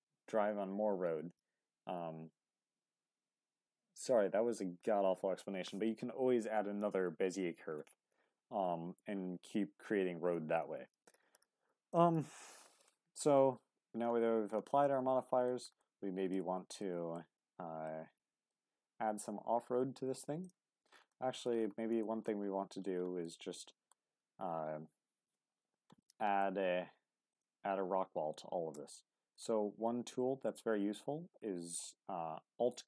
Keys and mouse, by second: 12.0-12.4 middle drag, 12.9 middle click, 14.8-15.5 middle drag, 16.1 middle click, 16.4 Tab, 16.8 middle click, 17.9 middle click, 21.1 middle click, 22.0 shift+middle click, 23.2 middle click, 26.0 middle click, 27.3 click, 29.3-30.5 alt+drag.